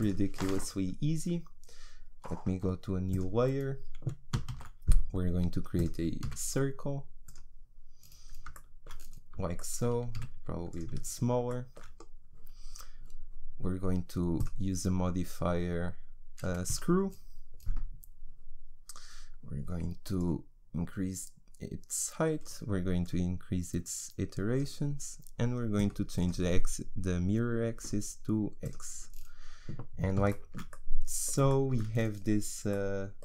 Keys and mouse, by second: 3.1-5.8 drag, 4.5 shift+a, 6.2 s, 10.2 s, 14.4-16.8 drag, 18.4-28.7 drag, 29.1-30.7 middle drag, 30.7 click, 30.9-33.2 middle drag.